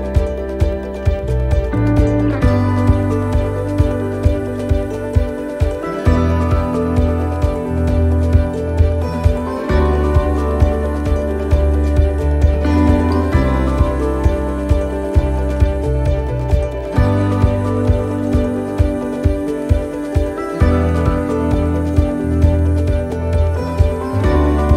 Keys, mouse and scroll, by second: 3.2 middle click, 4.3 ctrl+t, 5.4 ctrl+r, 7.2 s, 9.2 middle click, 14.7 middle click, 15.4-16.1 scroll up 2, 15.8 middle click, 24.0 middle click, 24.4-24.7 scroll down 3.